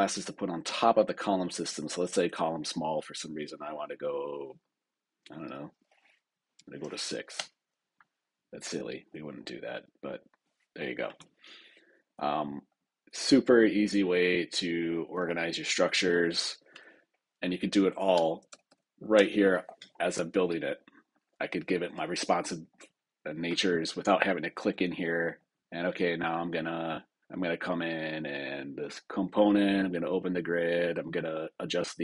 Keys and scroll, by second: 7.3 Return, 18.0 super+Return.